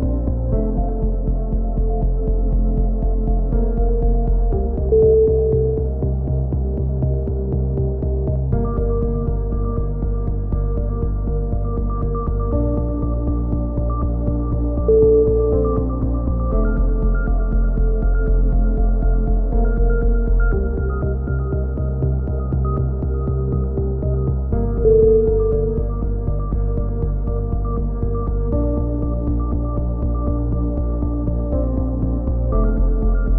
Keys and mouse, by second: 1.2 right click, 2.7 right click, 3.6 click, 5.2 a, 5.6 click, 6.9-7.9 right drag, 7.6 click, 11.0 right click, 11.4 click, 13.9 a, 14.0 middle click, 14.6 z, 14.9 click, 16.3 KP_3, 16.9 z, 17.3 click, 18.7 KP_2, 18.8 KP_2, 19.1 z, 19.6 ctrl+r, 21.4-22.6 right drag, 22.6 f, 22.8 a, 23.1 click, 23.2 right click, 23.9 click, 24.2 middle click, 24.8-26.3 drag, 26.3 right click, 26.3 f, 26.7-28.2 right drag, 27.8 f, 28.4 click, 29.0 middle click, 29.3 click, 29.9 f, 30.1 a, 30.4 click, 30.9 middle click, 31.2 click, 31.8 KP_3, 32.2 z.